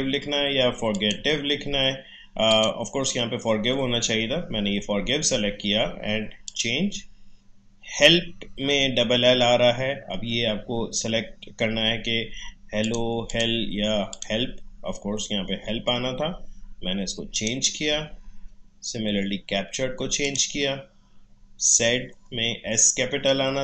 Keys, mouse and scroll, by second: 6.4 click, 12.8 click, 17.3 click, 20.2 click.